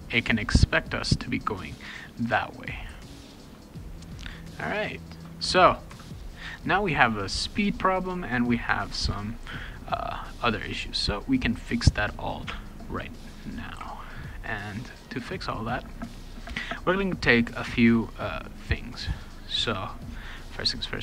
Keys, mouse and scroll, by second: 2.9 w, 9.4 click, 12.7 scroll up 2, 13.8 b.